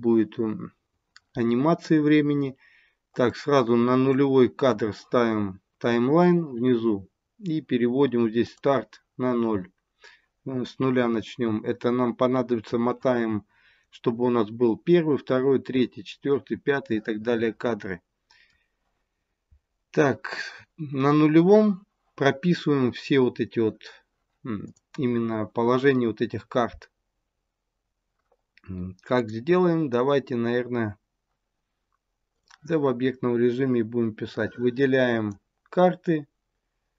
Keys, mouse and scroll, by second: 1.8 scroll up 4, 3.2 click, 8.4 click, 11.6-14.0 scroll up 4, 16.9 middle click, 24.6 click, 29.1 click, 34.1 click.